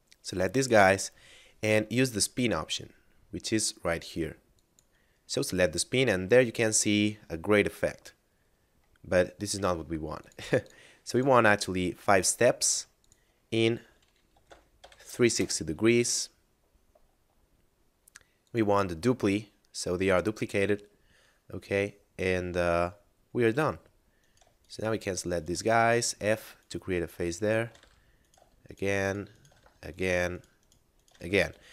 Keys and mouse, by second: 2.6 middle click, 4.5 click, 9.1 middle click, 10.2 click, 14.3 3, 15.4 Return, 17.4 middle click, 18.2 click, 19.7 middle click, 24.1 right click, 24.6 shift+right click, 25.0 shift+right click, 25.3 shift+right click, 25.6 f, 26.1 right click, 26.5 shift+right click, 26.9 shift+right click, 27.3 shift+right click, 27.5 f, 28.2 right click, 28.6 shift+right click, 29.0 shift+right click, 29.3 shift+right click, 29.5 f, 29.8 right click, 30.2 shift+right click, 30.6 shift+right click, 30.9 shift+right click, 31.1 f, 31.1 a.